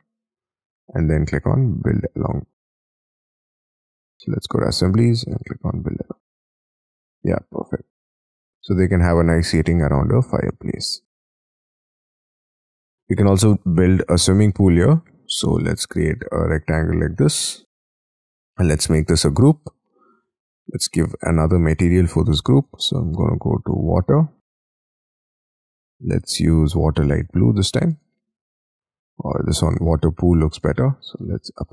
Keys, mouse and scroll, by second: 6.5 middle click, 7.2 middle click, 8.5 space, 8.7 scroll down 4, 10.0-11.2 scroll down 4, 11.2 middle click, 11.6-12.2 scroll down 6, 12.2 middle click, 13.0 middle click, 13.5 space, 13.6-14.1 scroll up 4, 14.2 double click, 14.5 double click, 14.8 scroll down 5, 15.3 scroll up 2, 15.4 r, 17.5 space, 18.0-18.6 scroll up 6, 18.6 double click, 19.0 g, 20.3-22.6 scroll up 4, 22.6 b, 27.2 space, 27.7 double click, 27.9 double click, 28.4 double click, 31.2 middle click.